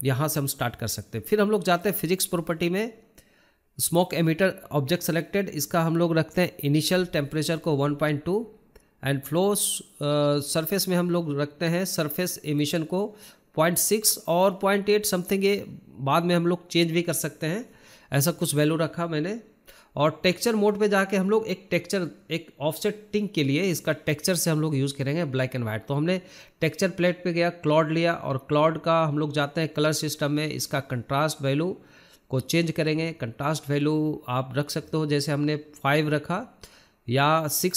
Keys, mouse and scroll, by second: 3.7-4.3 scroll down 1, 4.3-6.3 scroll down 2, 6.3-6.7 scroll down 1, 6.8-10.5 drag, 13.5-13.8 drag, 13.8-14.3 scroll down 6, 16.9-18.9 drag, 19.5 click, 22.5-23.0 scroll down 7, 23.2 drag, 23.7 scroll up 6, 23.9-24.7 scroll down 8, 24.7-25.0 drag, 25.2 scroll down 4, 26.0 click, 27.1 click, 28.9 click, 30.2-33.1 drag, 33.1-34.7 scroll down 8, 34.7 drag, 35.0-35.5 scroll down 8, 37.6-37.7 drag.